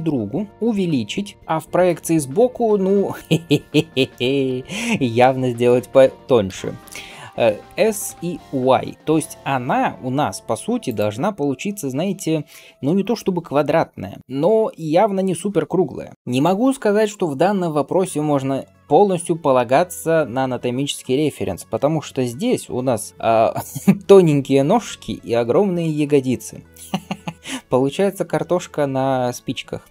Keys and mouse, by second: 0.7 s, 4.6-29.9 middle drag, 6.3 s, 14.2 KP_3.